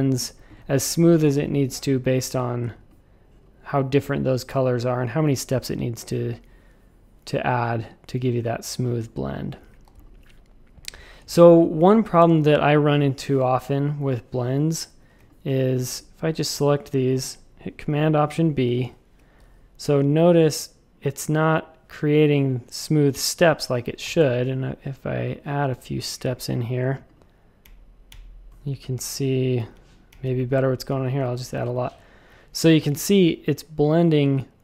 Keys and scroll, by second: 1.5 z, 2.3 v, 2.6 z, 8.5 typing, 9.8-12.5 typing, 12.2 Return, 15.0 a, 18.6 alt+super+b, 24.0 w, 24.1 Return, 27.6 Up, 28.1 Up, 29.6 Up, 29.7 Up, 30.1 Up, 30.2 Up.